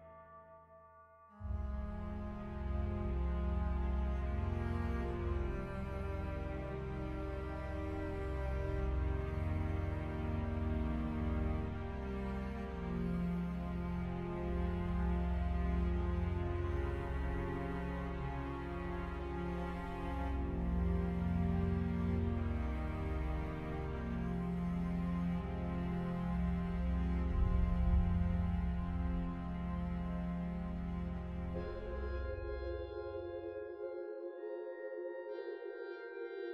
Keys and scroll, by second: 0.5 Tab, 2.7 ctrl+r, 5.9 Tab, 13.6 Tab, 15.8 3, 17.2 g, 17.5 z, 20.8 g, 21.1 z, 22.4 ctrl+r, 26.1 1, 26.7 shift+z, 28.6 shift+z, 29.4 g, 29.8 x.